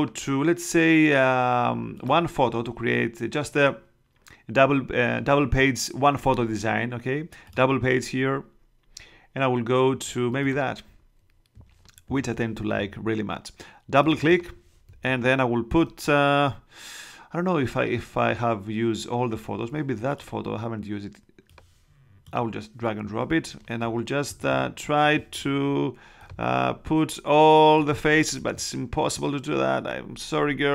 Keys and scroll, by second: 15.0 super+Tab, 24.2 super+-.